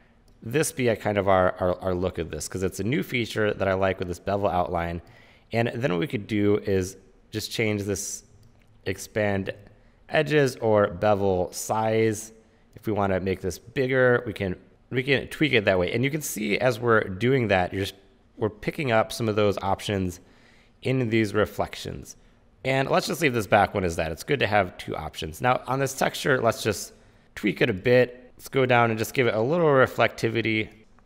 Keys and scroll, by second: 9.6 super+z, 14.7 super+z.